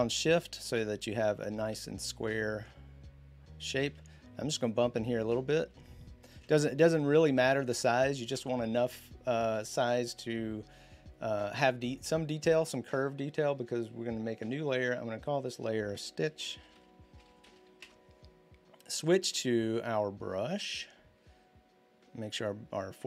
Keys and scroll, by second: 3.7 z, 5.5 b, 15.8-17.8 typing.